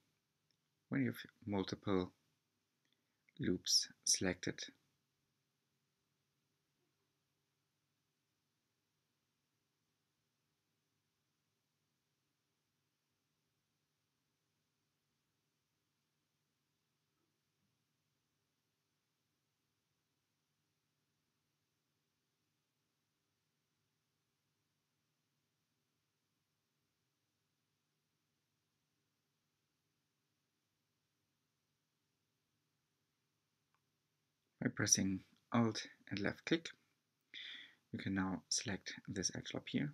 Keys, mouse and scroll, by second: 0.0-2.6 scroll up 2, 2.6 2, 3.6 alt+click, 6.1 alt+shift+click, 7.4-9.5 drag, 9.5 s, 13.6-14.9 shift+middle drag, 15.2 r, 19.2 2, 22.0 click, 22.2-23.9 right drag, 24.5 right click, 24.8 click, 26.0 z, 27.9-29.1 drag, 30.1 s, 37.7 2, 38.1 alt+click, 39.1 s.